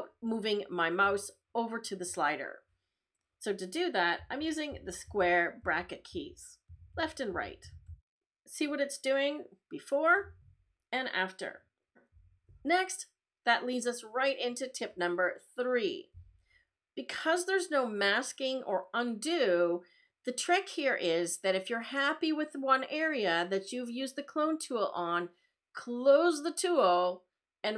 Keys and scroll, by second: 4.1 [, 4.7 ], 6.1 [, 6.7 ], 7.3 [.